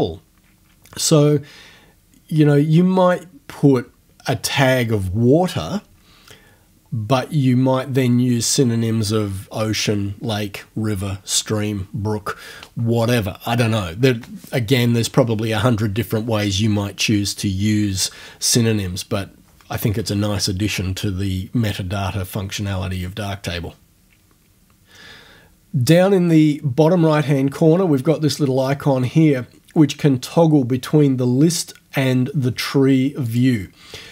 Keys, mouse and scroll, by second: 33.3 click.